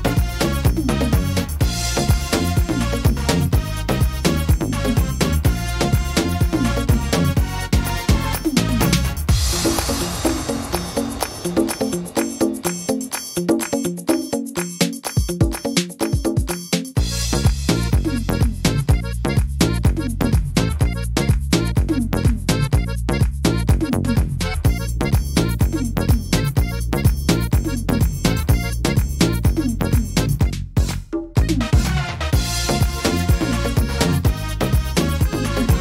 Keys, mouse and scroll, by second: 1.0 middle click, 1.9 s, 5.5 click, 5.5 middle click, 5.9-6.8 scroll down 5, 6.6 middle click, 7.1-7.5 scroll up 3, 7.5 shift+middle click, 7.9 scroll up 2, 8.3 middle click, 10.2 scroll up 1, 10.6 shift+middle click, 11.3 right click, 12.0 right click, 13.0 shift+right click, 13.1 shift+right click, 14.2 click, 15.5 click, 17.3 middle click, 18.4 right click, 19.2 shift+right click, 20.0 click, 21.3 middle click, 21.6-22.1 scroll down 4, 22.2 middle click, 22.8 shift+middle click, 23.1 scroll up 4, 23.7 shift+middle click, 24.1 middle click, 24.8 scroll up 1, 25.2 middle click, 26.8 click, 27.5 middle click, 27.8 scroll down 1, 28.3 click, 30.9 click.